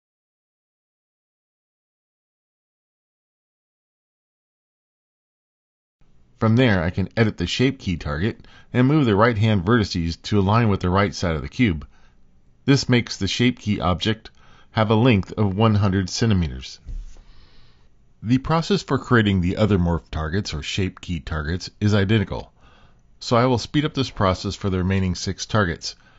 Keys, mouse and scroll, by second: 2.2 g, 4.9 click, 5.4 Tab, 7.4 click, 8.4 middle click, 9.9 g, 12.5 Tab, 14.3 click, 15.5 g, 17.6 click, 18.9 middle click, 20.4 middle click, 22.1 click, 23.0 h, 24.9 click, 25.2 click, 25.6 x, 26.0 click.